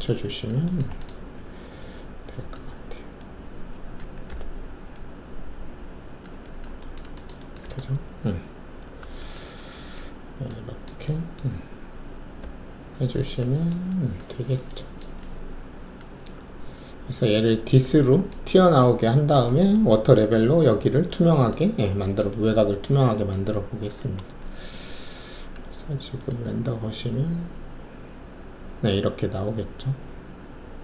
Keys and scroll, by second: 4.3 r, 11.8 alt+`, 12.4 alt+`, 24.4 alt+shift+F1.